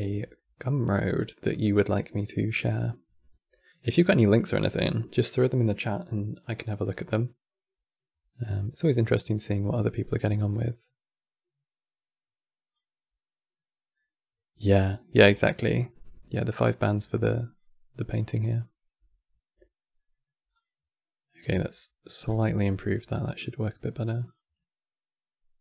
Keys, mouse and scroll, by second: 1.2 click, 9.2 click, 16.2-19.2 drag, 20.2 click, 21.2 scroll up 7, 21.9 scroll down 11, 23.1 click, 24.6 click.